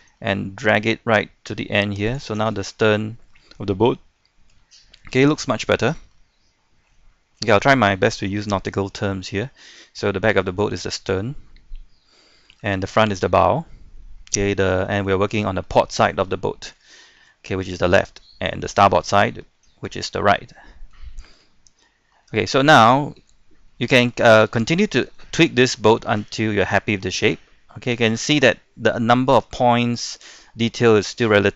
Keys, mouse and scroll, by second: 2.3-4.1 middle drag, 4.2 shift+middle click, 4.7 scroll up 1, 5.0-7.0 shift+middle drag, 7.1 shift+middle click, 7.8-8.2 scroll down 1, 8.2 middle click, 9.1 scroll up 1, 9.4 shift+middle click, 10.1-12.1 scroll down 1, 12.1 middle click, 12.7 shift+middle click, 13.7-14.0 scroll down 1, 14.0 middle click, 14.9 shift+middle click, 16.9 shift+middle click, 19.4 scroll down 1, 19.5-20.2 scroll up 1, 20.2-20.5 scroll down 1, 20.5 middle click, 21.1 shift+middle click, 21.5 scroll up 1, 21.8 middle click, 22.5 shift+middle click, 23.2 Tab, 23.7-31.5 middle drag.